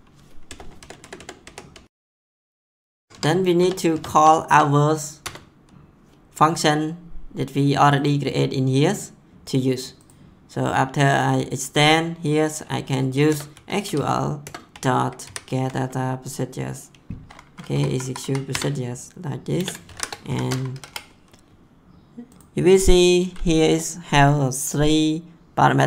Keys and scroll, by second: 0.4 BackSpace, 2.4 Tab, 3.6 BackSpace, 5.2 Return, 13.3 Return, 13.5 s, 13.8 q, 14.4 Return, 14.7 ., 15.2 g, 17.7 Down, 18.5 Return, 19.6 space, 19.9 shift+9, 20.3 ;, 20.7 Left.